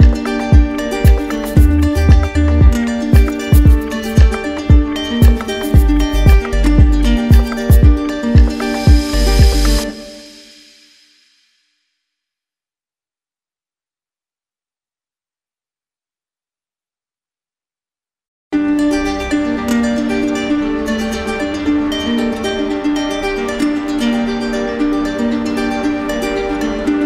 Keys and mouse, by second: 1.4 click, 2.7 click, 4.4 click, 4.9 alt+click, 6.0 click, 9.5 click, 13.1 click, 14.0 click, 16.4 click, 17.0 click, 18.7 click, 19.3 click, 21.5 click, 24.6 alt+click.